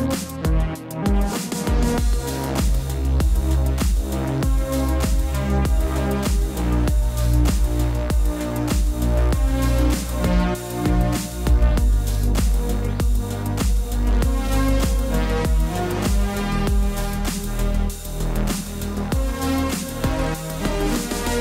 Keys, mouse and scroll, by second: 1.4 b, 2.9-4.6 typing, 4.5 click, 9.4 space, 9.4 click, 9.5 space, 10.5 click, 11.4-12.1 typing, 12.1 click, 15.8 click.